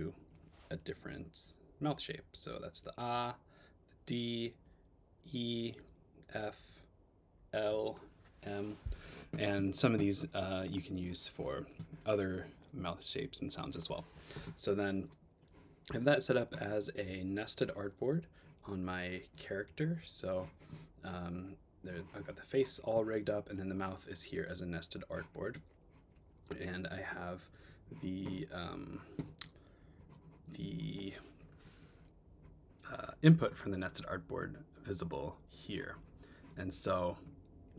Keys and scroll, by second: 1.1 Up, 2.9 Up, 4.5 Up, 8.0 Up, 15.2 space, 17.6 Tab, 27.6 Tab.